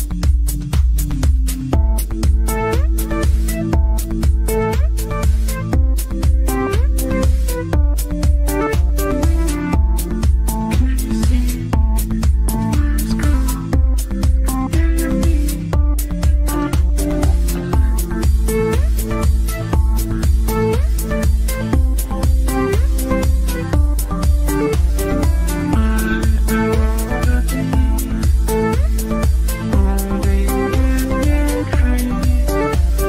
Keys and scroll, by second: 22.4 c.